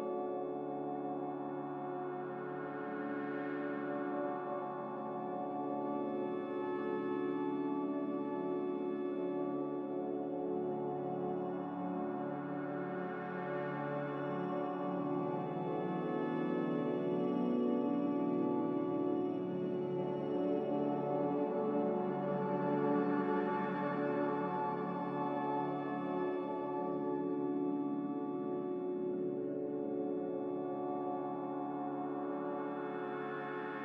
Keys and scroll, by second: 6.0 z, 13.5 x, 16.7 1, 16.8 Return, 20.1-20.9 typing, 20.9 Return, 29.0 2, 29.2 Return.